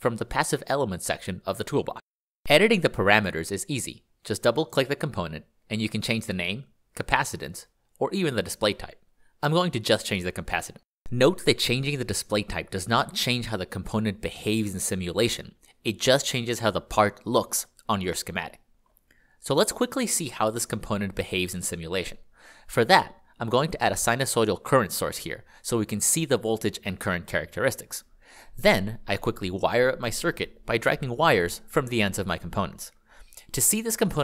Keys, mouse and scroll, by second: 1.6 ctrl+click, 7.0 Left, 7.9 0, 9.6 Return, 11.4 ctrl+click, 19.0 click, 24.0 click, 31.8 g, 33.3 click.